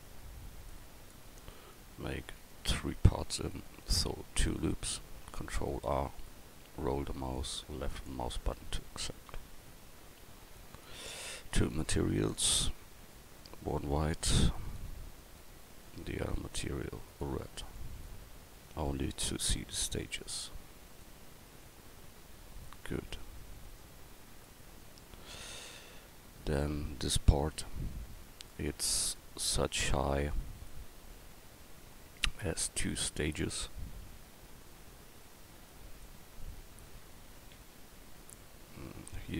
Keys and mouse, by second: 0.7-2.5 middle drag, 2.5 Tab, 4.0 ctrl+r, 9.3 Tab, 19.1 Tab, 21.6 Tab, 31.7 KP_4, 32.9 KP_1, 36.9 KP_1.